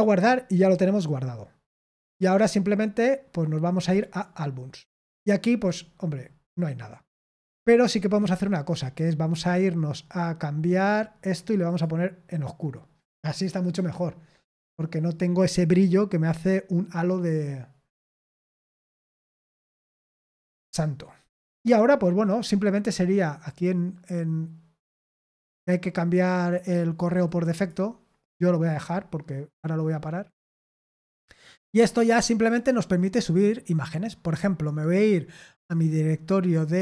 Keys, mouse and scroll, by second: 2.3 click, 3.9 click, 8.0 click, 11.6 click, 21.6 click, 23.4 click, 27.2 click, 28.6 click, 32.5 click.